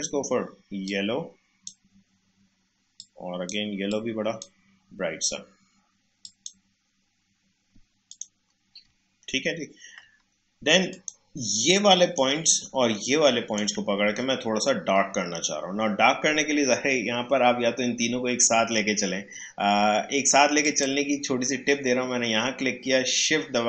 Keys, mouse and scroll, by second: 0.8-6.2 drag, 8.9 scroll down 2, 9.6 scroll up 2, 10.9-13.0 drag, 13.0-16.0 shift+drag, 20.6-23.6 drag.